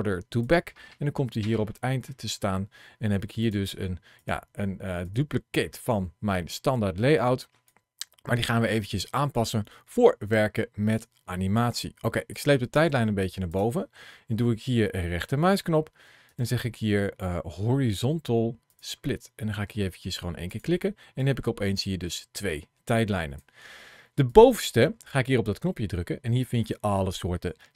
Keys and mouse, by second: 3.3 click, 4.0 click, 4.9 click, 7.6-13.5 drag, 16.1-20.4 right drag, 21.1-23.3 drag, 24.2-27.7 drag.